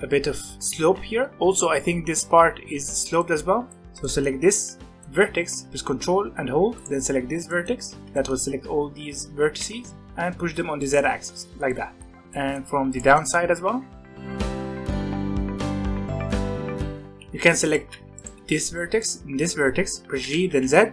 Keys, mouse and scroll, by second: 0.5 middle click, 1.3-3.2 scroll up 1, 3.2 shift+middle click, 3.4 scroll up 1, 3.7-6.7 middle drag, 6.7 ctrl+click, 7.5-8.8 middle drag, 8.8-9.3 scroll up 1, 9.3 g, 10.8-12.1 middle drag, 12.1 click, 12.3 middle click, 12.9 ctrl+click, 13.1 middle click, 13.4 g, 14.5 click, 15.2 shift+click, 15.3 shift+click, 15.5 g, 16.1 click, 16.8 g, 17.5 click, 17.8 alt+a, 18.1 click, 18.9 shift+click, 20.1 g.